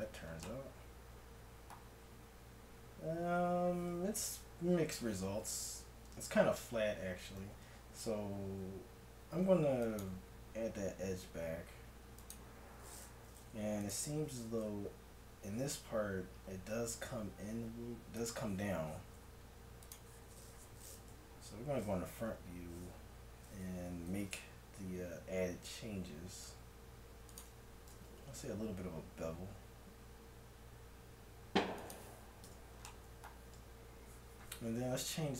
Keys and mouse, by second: 2.8-4.9 middle drag, 3.4 Tab, 6.2 ctrl+z, 7.4 ctrl+z, 9.2 ctrl+r, 13.9-15.5 drag, 15.5 g, 19.9-21.3 drag, 21.3 KP_1, 24.0 g, 28.0 ctrl+b, 32.5 Tab.